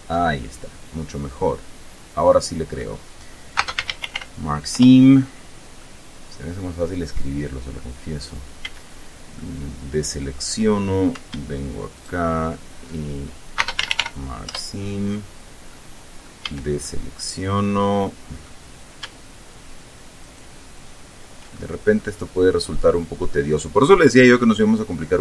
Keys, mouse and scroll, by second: 0.6-1.0 scroll down 2, 1.0-3.2 drag, 3.8-4.9 typing, 4.9 Return, 6.0-8.1 middle drag, 8.3-8.7 scroll up 2, 8.9 a, 9.6-10.8 middle drag, 12.2 alt+shift+right click, 13.8-14.8 typing, 15.9 click, 16.7 a, 17.1-18.9 drag, 20.4 alt+shift+right click, 21.8 alt+shift+scroll down 1, 22.2-23.6 middle drag.